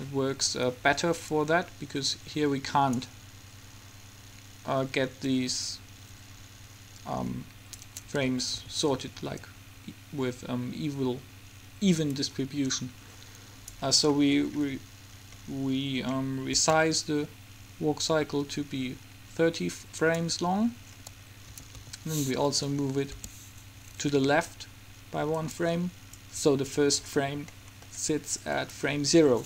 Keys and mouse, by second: 8.5 a, 8.7 a, 9.5-11.6 drag, 16.7 s, 21.6 a, 22.1 a, 23.3 g, 26.3-28.0 drag, 28.0-29.4 middle drag.